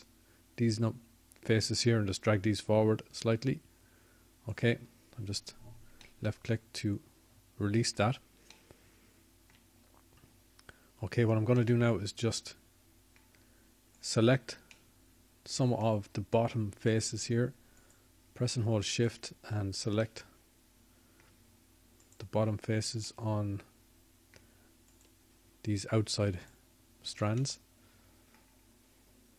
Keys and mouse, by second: 1.5 z, 2.9 z.